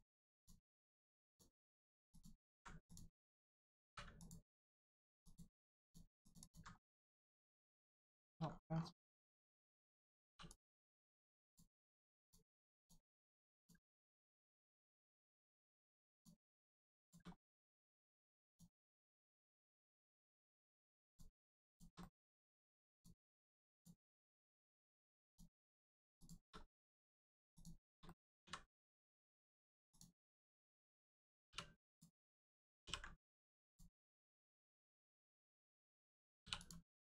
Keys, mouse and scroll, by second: 0.3 alt+click, 0.8 click, 0.9 middle click, 1.2 click, 2.1 alt+click, 2.8 click, 3.8 3, 4.1 click, 4.5 middle click, 5.2 alt+click, 5.8 alt+click, 6.2 alt+click, 6.3 alt+click, 6.7 middle click, 6.8 middle click, 7.1-7.4 scroll up 1, 7.8 middle click, 8.1 shift+middle click, 8.4 scroll up 1, 10.2 2, 10.4 click, 11.4 shift+click, 12.1 shift+click, 13.9 middle click, 14.6 shift+middle click, 14.9 middle click, 16.1 shift+click, 17.3 middle click, 18.5 shift+click, 19.3 shift+click, 19.7 middle click, 21.0 shift+click, 21.6 shift+click, 21.9 click, 22.0 middle click, 22.9 shift+click, 23.7 shift+click, 24.1 click, 24.1 middle click, 25.2 shift+click, 26.1 shift+click, 26.6 middle click, 27.5 shift+click, 28.0 middle click, 29.9 click, 30.4 middle click, 31.9 click, 32.2 middle click, 32.8 ctrl+e, 33.6 click, 34.0 middle click, 36.5 click, 37.0 alt+click.